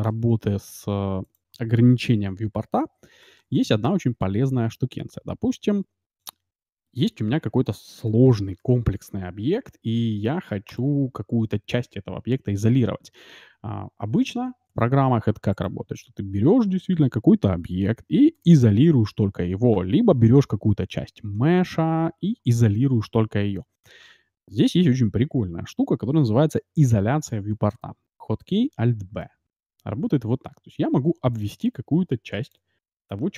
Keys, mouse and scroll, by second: 2.8-4.3 typing, 7.7 KP_0, 8.3 shift+f, 11.2-13.3 middle drag, 15.5-17.5 right drag, 18.3 KP_Divide, 20.3 KP_Divide, 21.4 Tab, 23.6 Tab, 29.1 alt+b.